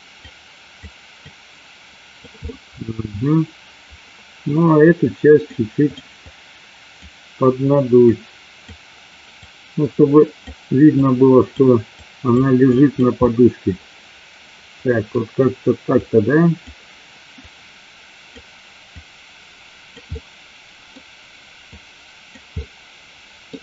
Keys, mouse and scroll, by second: 0.3 click, 1.3 click, 2.7 middle click, 5.0 click, 6.2 click, 8.2 click, 9.5-10.6 drag, 11.0 click, 12.0 click, 12.8 click, 13.3-15.2 middle drag, 16.1 click, 17.5 click, 19.1 click, 20.3 middle click, 21.8 click, 22.6-23.6 middle drag.